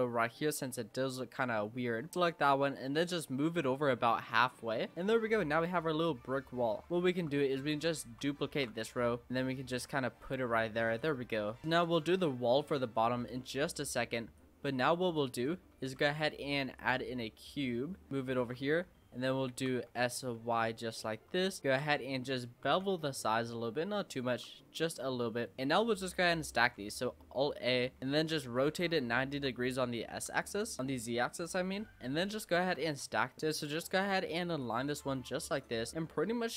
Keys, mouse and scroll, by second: 0.0-0.6 typing, 0.9 click, 1.3 click, 1.5 click, 2.1 click, 2.6 click, 4.9 click, 5.2 scroll down 4, 5.5-6.9 middle drag, 6.9 click, 6.9 scroll up 4, 7.1 scroll down 1, 7.1 Tab, 8.5 shift+d, 9.3 click, 10.8 Tab, 11.0 click, 11.3-11.6 scroll down 4, 11.6-12.0 shift+middle drag, 12.0-12.6 scroll up 3, 12.6 click, 14.4 click, 15.3 click, 15.7 shift+a, 17.6-18.1 scroll up 2, 18.1 click, 18.4 Tab, 18.7 scroll up 2, 19.0 shift+middle click, 19.6 shift+scroll down 1, 19.9 s, 21.6 shift+middle click, 22.0-22.7 scroll up 4, 22.7 ctrl+b, 24.3 Tab, 24.6 scroll down 1, 24.8-25.7 middle drag, 25.7 Tab, 26.6 a, 28.0 shift+d, 28.4 r, 31.4 click, 31.7-32.2 scroll up 4, 32.2 shift+middle click, 32.8 scroll up 1, 33.1 g, 33.4 l, 33.5 click, 33.8-34.6 scroll up 3, 34.6 click, 35.8-36.5 middle drag.